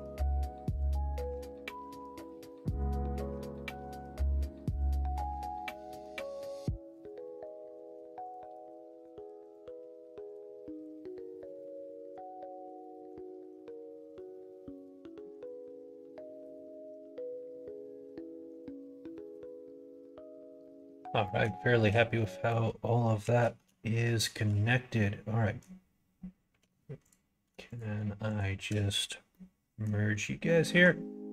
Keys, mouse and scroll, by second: 0.4 ctrl+click, 1.1 ctrl+click, 2.7 ctrl+click, 3.1 middle click, 4.3 ctrl+e, 5.3 click, 7.7 ctrl+e, 9.4 click, 9.7 ctrl+e, 11.3 middle click, 11.8 shift+middle click, 12.8 middle click, 14.0 alt+click, 15.1 shift+middle click, 15.9 shift+middle click, 17.1 middle click, 18.5 alt+click, 19.2-20.3 middle drag, 20.5 shift+middle click, 21.2 middle click, 21.5 shift+middle click, 22.1 middle click, 24.2 shift+click, 24.9 middle click, 26.4 1, 26.9 click, 27.6 click, 28.2 shift+click, 29.2 middle click, 30.6 m.